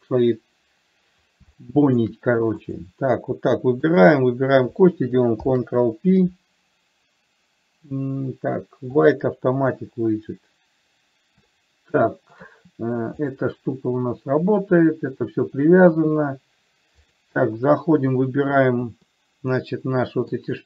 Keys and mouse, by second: 1.8-2.3 shift+middle drag, 4.1 shift+click, 5.7 ctrl+p, 11.7-12.7 shift+middle drag, 17.3 click, 19.5-20.6 middle drag.